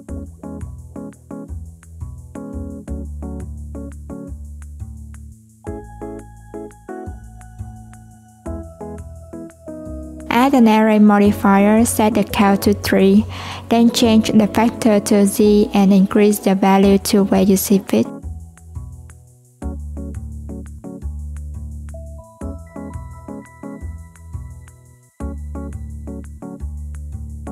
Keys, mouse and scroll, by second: 0.6 click, 1.9 click, 4.3 click, 8.0 click, 10.2-13.2 drag, 14.8-16.0 drag, 17.3 click, 19.2 ctrl+z, 20.0-23.9 drag.